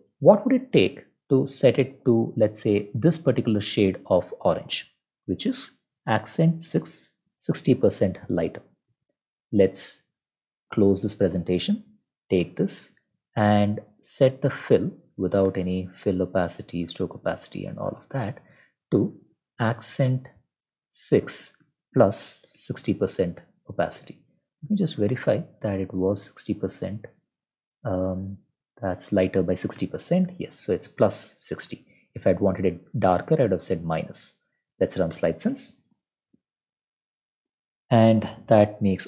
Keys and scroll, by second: 14.9 Down, 15.1 Down, 15.9 shift+Down, 17.3 BackSpace, 17.7 shift+Up, 17.9 BackSpace, 19.2 ctrl+shift+Left, 19.2-23.0 typing, 23.0 ctrl+s, 32.1 ctrl+Left, 32.8 -, 33.5 ctrl+z, 34.0 ctrl+s, 34.8 Up, 35.1 Return.